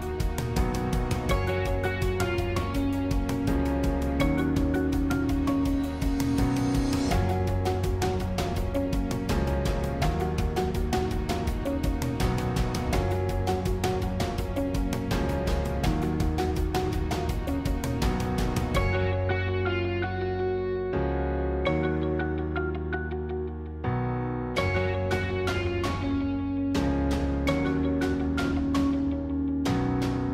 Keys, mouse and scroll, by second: 6.5-15.7 drag, 17.8-19.2 middle drag, 19.2-20.0 scroll up 2, 20.1-25.5 middle drag, 28.3 shift+click, 29.3 shift+click, 30.0-30.3 scroll up 2.